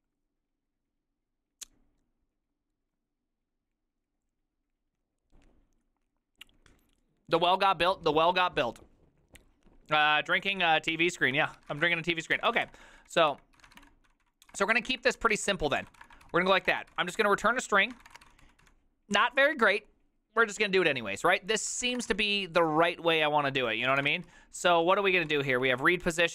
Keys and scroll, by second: 11.6-12.5 typing, 12.6 Return, 12.7 ctrl+d, 12.9 ctrl+d, 13.0 ctrl+d, 13.1 ctrl+d, 13.5-19.3 typing, 21.7-22.7 typing, 23.8 ctrl+c, 24.0 typing, 24.1 Return, 24.2 ctrl+u, 24.4 ctrl+u, 24.7 ctrl+u, 24.9 ctrl+u, 25.4-26.3 typing.